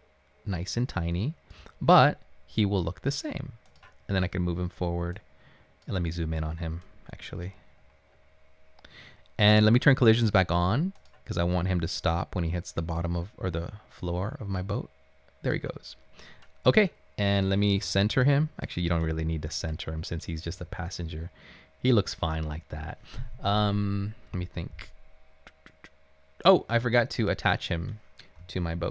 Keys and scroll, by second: 18.0-19.3 typing, 20.5 typing, 28.2-28.9 typing.